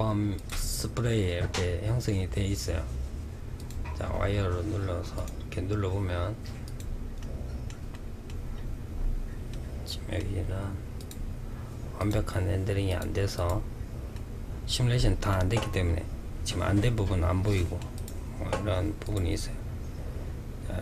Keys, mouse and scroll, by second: 2.7 click, 4.3 click, 5.8 click, 6.3-7.7 middle drag, 7.7-8.4 scroll up 4, 8.6-10.1 middle drag, 10.1 click, 11.1 click, 12.0 click, 12.5 click, 13.3-16.3 middle drag, 16.6-17.1 middle drag, 17.1 click, 18.2 click.